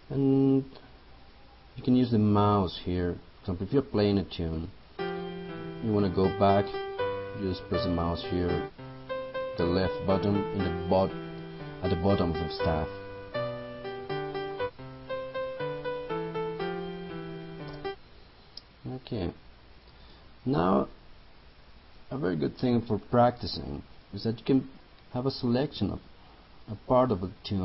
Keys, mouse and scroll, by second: 4.6 click, 17.8 space.